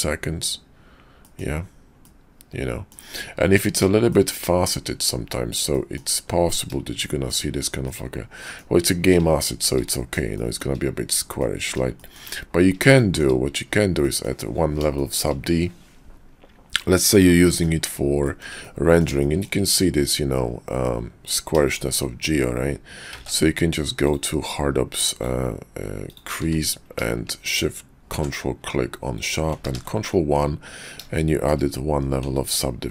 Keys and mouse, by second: 1.2 click, 2.0 click, 2.1 middle click, 2.3 click, 2.4-2.9 middle drag, 4.1 shift+middle drag, 5.7 shift+drag, 6.9-7.3 shift+drag, 7.9-8.6 drag, 9.4 shift+drag, 9.9 click, 10.4 shift+drag, 11.4-11.7 middle drag, 11.7 drag, 12.0 shift+drag, 13.0 shift+drag, 14.0 click, 14.9-15.2 shift+drag, 17.1 click, 17.2 middle click, 17.6 click, 18.2 shift+drag, 18.6 click, 19.2 shift+drag, 21.7 shift+drag, 23.1 ctrl+`, 26.4 q, 29.7 ctrl+1, 31.2-31.5 shift+drag, 32.3 ctrl+`.